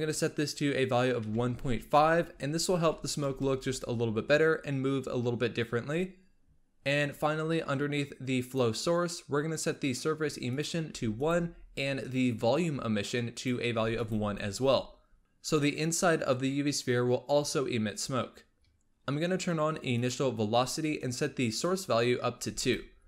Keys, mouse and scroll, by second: 8.3-11.2 drag, 13.2 click, 18.8 scroll down 3, 19.8 click, 21.5-22.6 drag.